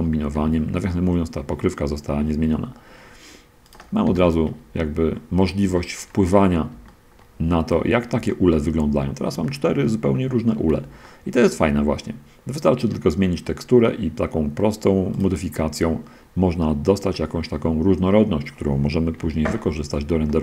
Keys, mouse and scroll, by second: 0.6 g, 2.8 Escape, 3.6-4.0 drag, 4.4 g, 4.8 Escape, 5.1 middle click, 5.1-6.6 scroll up 3, 5.5-6.4 middle drag, 6.9-7.6 shift+middle drag, 7.7-8.0 shift+scroll down 1, 8.2-8.9 shift+drag, 8.9 shift+middle drag, 9.0 shift+scroll down 1, 9.7 shift+click, 9.8 shift+middle click, 11.2 shift+click, 11.3 shift+middle click, 15.4-18.3 middle drag, 19.4 5, 20.2-20.4 shift+middle drag.